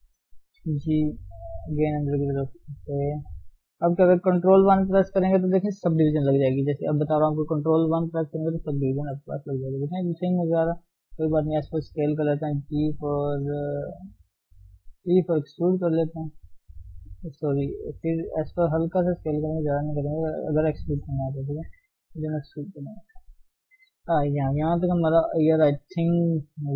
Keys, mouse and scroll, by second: 0.7 g, 2.2 Tab, 2.5 middle click, 3.3 ctrl+Tab, 3.5 scroll down 1, 3.8 middle click, 4.4 ctrl+1, 4.9 middle click, 5.7 KP_3, 6.0-6.3 scroll up 2, 6.3-6.9 scroll down 4, 6.9 KP_1, 8.3 KP_3, 8.9 KP_1, 9.3-10.9 scroll up 6, 9.9 Tab, 10.9 s, 12.5 g, 15.0 e, 16.9 ctrl+z, 17.5 ctrl+z, 18.4 s, 19.2 shift+z, 19.6 s, 20.2 shift+z, 21.7 e, 22.7 Tab, 22.8 scroll down 3, 22.9-23.9 middle drag, 23.9-24.6 scroll down 5, 24.6 KP_1, 25.3-25.7 scroll up 2.